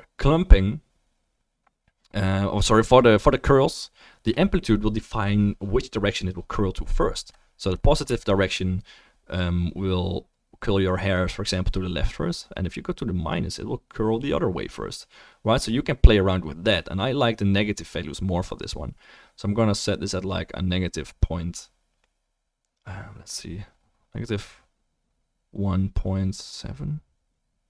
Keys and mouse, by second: 8.8-15.7 shift+middle drag.